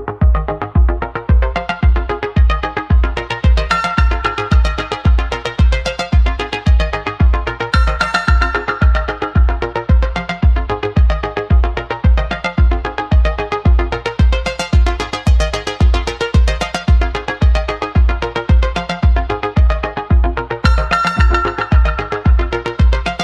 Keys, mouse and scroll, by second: 1.5-2.8 middle drag, 2.8 click, 5.0 e, 8.5-9.9 middle drag, 9.9 click, 12.1 e, 15.0 e, 17.0-18.1 middle drag, 18.1 click, 20.1 e, 21.8-23.2 middle drag.